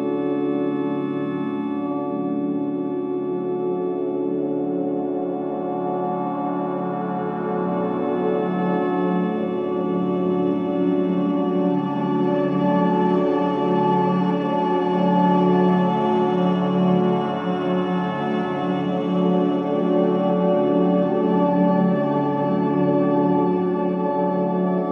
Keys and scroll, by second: 1.5 F1, 7.5 3, 11.7 ctrl+z, 12.4 ], 12.8 ctrl+z, 13.5 F1, 16.9 ], 17.0 Delete, 18.1 4, 21.3 Delete, 21.9 3, 22.3 ], 23.2 ctrl+d, 23.3 Escape.